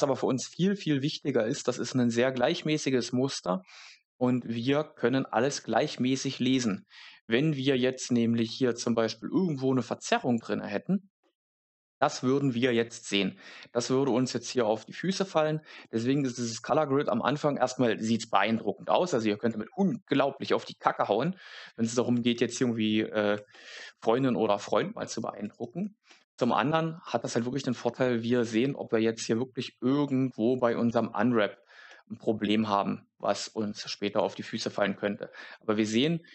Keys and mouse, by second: 7.1 middle click, 15.7-21.6 middle drag, 25.5 shift+middle click, 26.4 Tab.